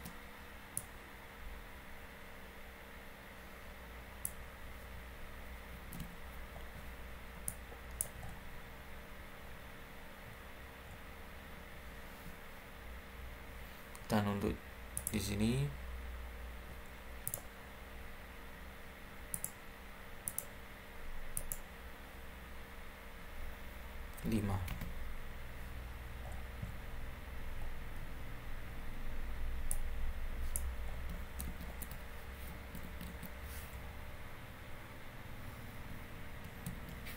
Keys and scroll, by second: 5.6 Escape, 5.7 `, 5.9 Escape, 24.1 5, 24.6 Return, 31.1 Escape, 31.4 Escape, 36.7 Escape.